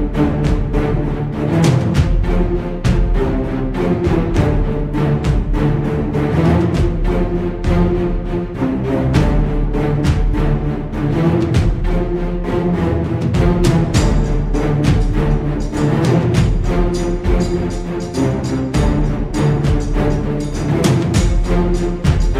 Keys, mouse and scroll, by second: 1.1 click, 4.6 click, 5.7 click, 7.1-12.0 typing, 13.3 Home, 13.8 shift+Right, 16.1 click, 18.9 click, 19.7 click, 20.6 ctrl+scroll up 2, 21.4 ctrl+scroll down 2, 22.1 ctrl+click.